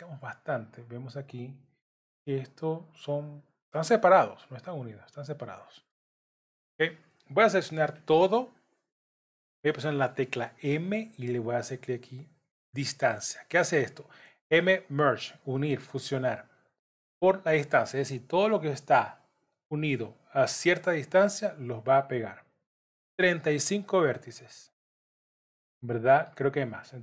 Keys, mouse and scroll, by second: 0.6 click, 1.9 g, 4.8 scroll down 4, 5.2 middle click, 6.2-6.8 scroll down 2, 7.9 scroll down 4, 7.9 a, 9.9 m, 24.2 middle click.